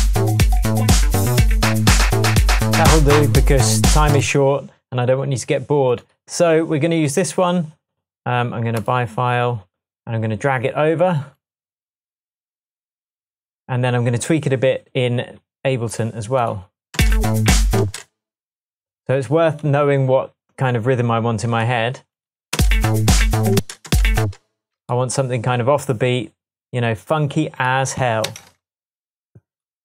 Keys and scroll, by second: 2.6 space, 4.2 space, 17.0 space, 22.6 space, 24.2 space, 28.3 BackSpace.